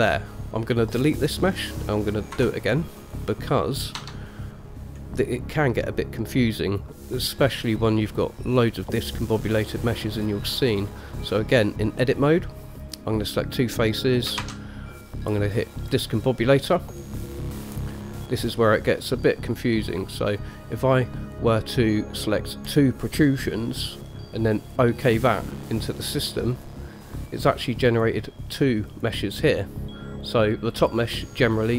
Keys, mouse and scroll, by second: 2.5 Delete, 3.2 click, 4.2 Tab, 8.3 click, 9.1 click, 14.6 shift+a, 26.7 click, 28.1 click, 29.1 click, 31.0 click.